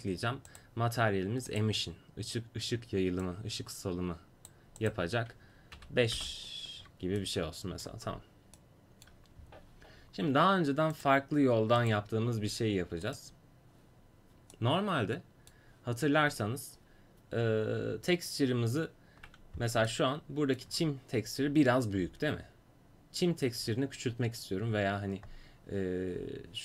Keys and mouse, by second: 6.8 middle click.